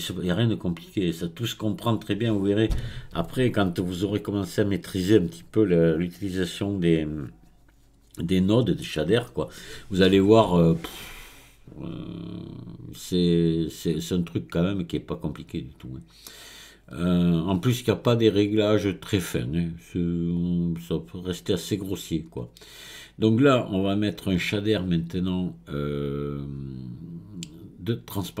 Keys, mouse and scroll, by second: 20.4-23.5 drag.